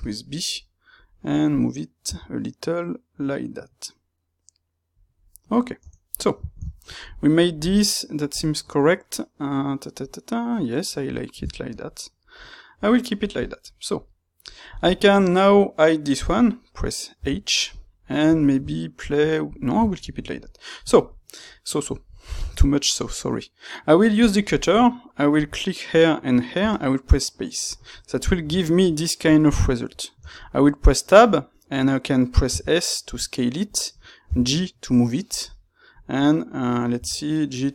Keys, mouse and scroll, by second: 0.5-5.0 middle drag, 2.0 g, 5.0 click, 5.2-13.4 middle drag, 13.4 click, 13.6-17.6 middle drag, 17.1 h, 17.6 click, 17.9-35.3 middle drag, 24.2 space, 25.3 space, 35.3 click, 35.4-37.7 middle drag, 36.9 g.